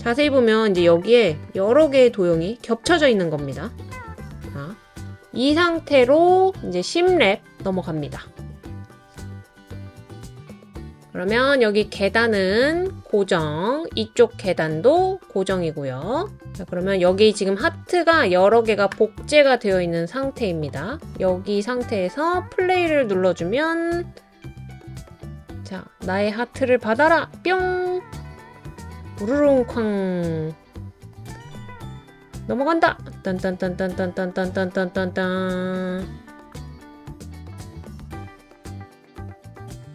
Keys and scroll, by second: 3.8 super+z, 4.3 super+z.